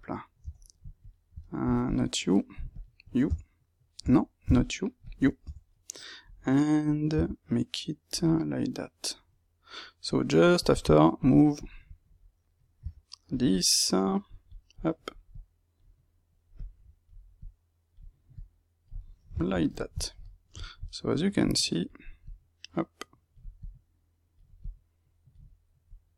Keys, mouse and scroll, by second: 0.4 Tab, 1.0 shift+click, 1.3 middle click, 1.9 shift+click, 3.3 Tab, 4.5 shift+click, 5.5 Tab, 5.6-10.5 middle drag, 7.0 g, 10.5 click, 11.7-12.8 shift+middle drag, 12.8 g, 13.4 middle click, 14.2 click, 15.2 click, 16.5 click, 18.3 click, 18.9-21.4 middle drag, 21.4-22.7 drag, 24.6-26.1 drag.